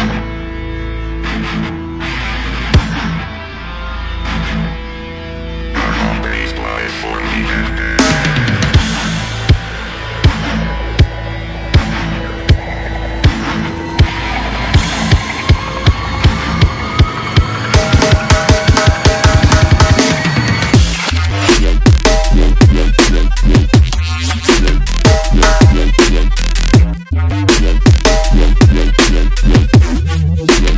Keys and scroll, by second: 1.5 ctrl+g, 10.5 alt+Up, 18.4 alt+Right, 26.9 ctrl+g.